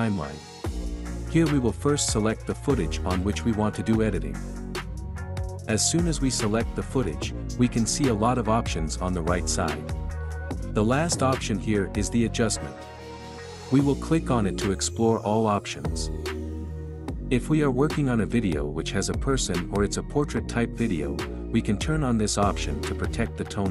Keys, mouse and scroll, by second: 4.7 click.